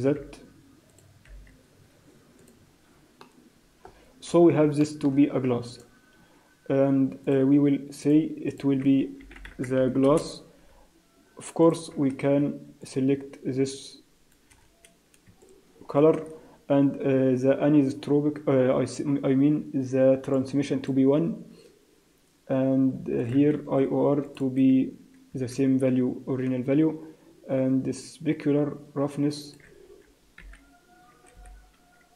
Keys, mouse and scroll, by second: 0.1 r, 1.3 g, 2.8-3.1 scroll down 3, 3.2 middle click, 3.8-4.6 scroll up 10, 4.8 shift+middle click, 5.1 scroll up 2, 5.6 click, 7.2 click, 8.0 click, 8.5 click, 10.0 s, 11.6 click, 16.7-18.2 scroll down 1, 18.2-19.4 scroll down 4, 19.4-20.3 scroll down 3, 20.3 click, 23.1 click, 29.4 click.